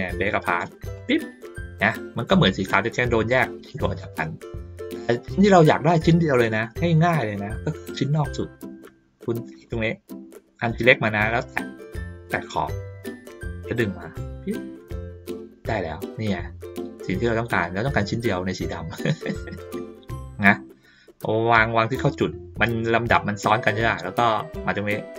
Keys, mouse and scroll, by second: 0.9 click, 3.7 ctrl+middle click, 3.7-4.2 ctrl+scroll down 1, 4.7 ctrl+middle click, 4.7 ctrl+scroll down 1, 5.4 ctrl+middle click, 5.4 ctrl+scroll down 1, 6.3 middle click, 7.2 ctrl+scroll up 2, 8.0-8.5 ctrl+scroll down 2, 9.5 click, 12.2 click, 13.6-22.1 drag, 23.5 middle click.